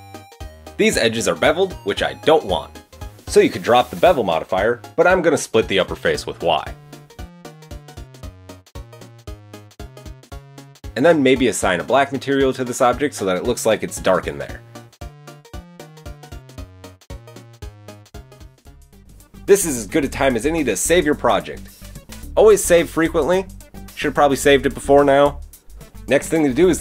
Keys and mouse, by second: 0.1-1.9 middle drag, 6.1 middle click, 7.2 Tab, 8.3 click, 8.7 y, 8.8 Escape, 9.2 y, 9.3 Escape, 9.6 Tab, 10.2 Tab, 10.3 Tab, 10.4 click, 10.4 middle click, 10.4 right click, 10.5 Tab, 10.6 a, 12.5-14.7 middle drag, 16.2 Tab, 17.2 middle click, 17.8 middle click, 18.0 middle click, 23.5 middle click, 25.7 KP_7, 25.7 KP_1.